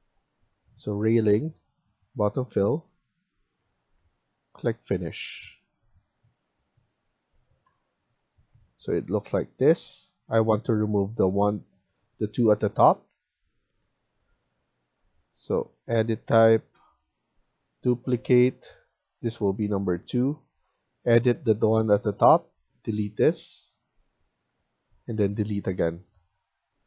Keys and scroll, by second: 3.7 Escape, 3.9 Escape, 10.4 Escape.